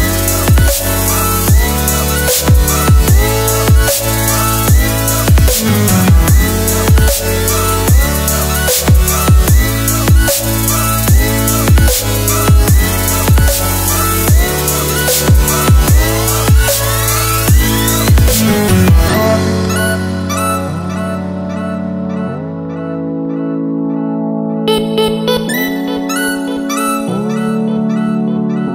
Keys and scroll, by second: 4.7 f, 7.6 Tab, 11.5 Tab, 16.1 shift+Tab, 19.8 ctrl+Tab.